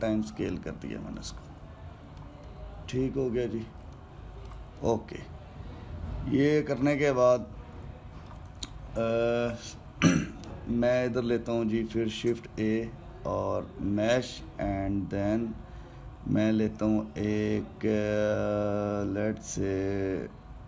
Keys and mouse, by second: 2.0-12.4 ctrl+middle drag, 13.0 shift+a.